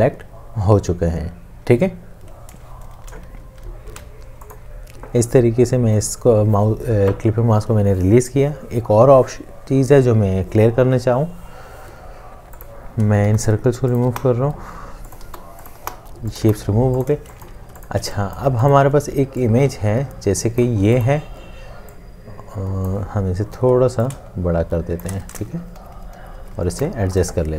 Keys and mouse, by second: 3.9 ctrl+z, 13.3 Delete, 17.1 space, 17.7 alt+space, 17.8 ctrl+alt+click, 20.4 space, 24.3 alt+shift+click, 25.8 Down.